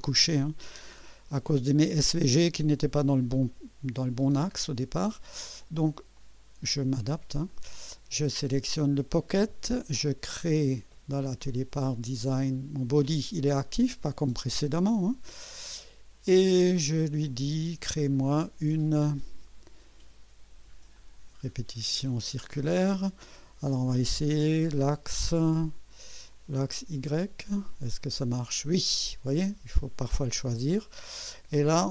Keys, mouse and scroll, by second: 0.7 scroll up 2, 4.2 scroll down 2, 6.1 click, 7.5-8.1 right drag, 16.2 click, 21.0 click, 26.8 click.